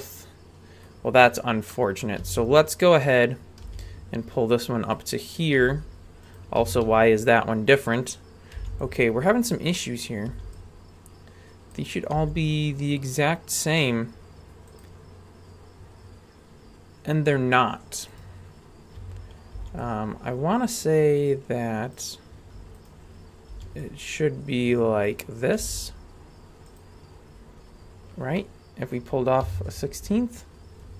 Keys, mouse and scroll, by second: 1.7 middle click, 2.2 a, 3.1 right click, 3.6 g, 5.6 g, 6.6 a, 8.5 b, 10.3 b, 12.1 g, 16.0-16.6 scroll up 1, 18.1 click, 19.0 a, 19.5 b, 22.8 shift+right click, 23.5 b, 25.6 g, 28.3 middle click, 29.4 KP_3, 30.3 scroll up 2.